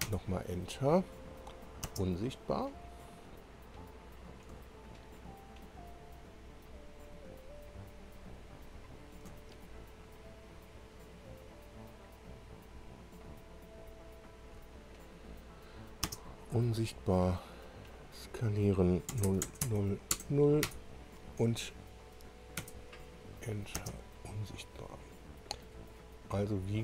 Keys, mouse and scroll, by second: 0.0 Return, 2.4 space, 4.2 click, 4.9 ctrl+click, 5.9 ctrl+click, 6.4 ctrl+click, 8.1 ctrl+click, 8.8-9.1 ctrl+scroll up 1, 10.3 ctrl+click, 11.1 ctrl+click, 12.1 ctrl+click, 12.7 ctrl+click, 14.0 ctrl+click, 16.0 space, 17.8 click, 19.1 0, 19.2 Tab, 19.6 0, 20.1 Tab, 20.6 0, 20.7 Return, 22.6 Return, 24.8 scroll down 2, 26.3-26.6 scroll up 2.